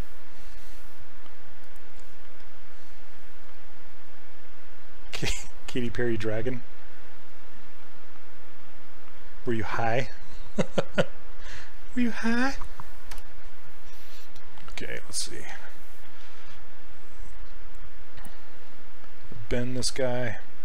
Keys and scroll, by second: 13.2 w.